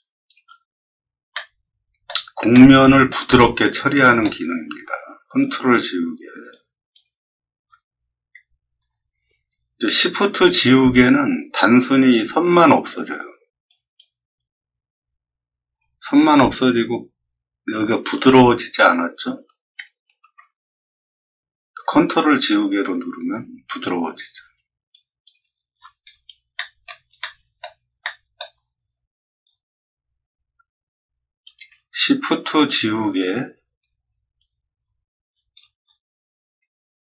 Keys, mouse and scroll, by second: 1.3 middle click, 2.5 shift+middle click, 3.2 middle click, 5.3 ctrl+click, 6.4 ctrl+click, 7.5 scroll down 4, 8.8 scroll up 2, 8.9 middle click, 9.2 middle click, 10.0 middle click, 11.9 shift+click, 13.6 shift+click, 16.0 scroll up 1, 20.1 ctrl+z, 22.4 ctrl+click, 25.7 middle click, 26.0 middle click, 26.5 middle drag, 27.1 shift+middle click, 27.9-28.3 shift+middle drag, 28.7 middle click, 28.7 scroll up 2, 29.4 scroll down 1, 30.0 scroll up 2, 30.6 middle click, 32.4 shift+click, 33.9 middle click, 34.0-34.8 scroll up 3, 35.2-35.5 scroll down 2, 35.7 middle click.